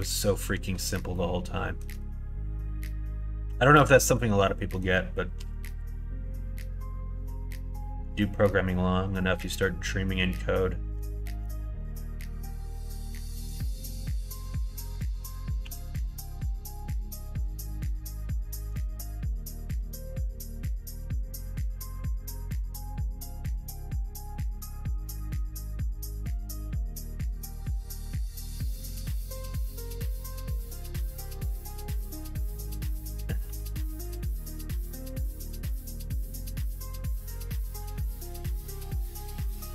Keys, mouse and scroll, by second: 1.2 shift+middle click, 4.2 middle click, 5.3 KP_1, 5.6 KP_3, 11.3 shift+d, 15.6 r, 32.1 shift+middle click, 33.4 x, 36.7 x.